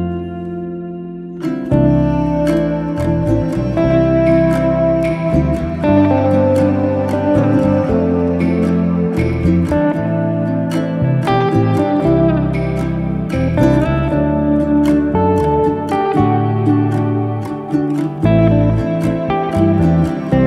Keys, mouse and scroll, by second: 0.0-0.7 middle drag, 0.7 click, 0.9-1.5 middle drag, 1.5-1.8 scroll up 2, 1.8-3.4 middle drag, 4.3 s, 5.3 ctrl+z, 5.6 click, 6.0 s, 8.2-8.9 middle drag, 8.9 click, 9.1-9.9 scroll down 1, 9.9 g, 11.3 middle drag, 11.6 click, 11.9-13.4 middle drag, 13.6 scroll up 2, 14.0-15.3 shift+middle drag, 15.3 click, 15.9 g, 18.0 g, 18.9-19.5 middle drag, 19.5 scroll down 1, 19.7-20.4 middle drag.